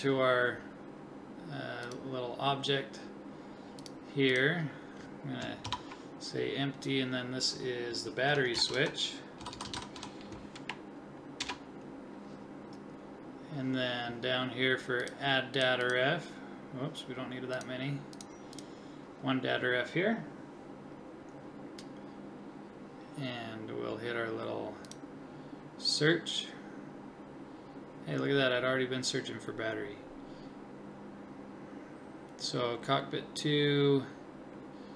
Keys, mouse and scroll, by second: 1.8-3.6 drag, 3.8-5.5 drag, 9.5 t, 15.0-20.5 drag, 24.9-27.2 drag.